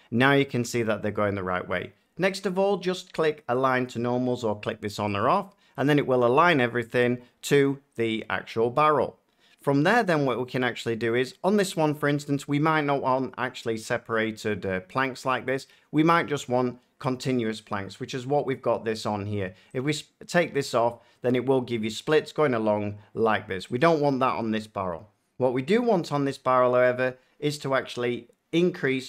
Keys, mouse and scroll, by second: 0.8 middle click, 5.1-7.3 drag, 11.0-13.1 middle drag, 19.7 click, 23.7-25.7 drag.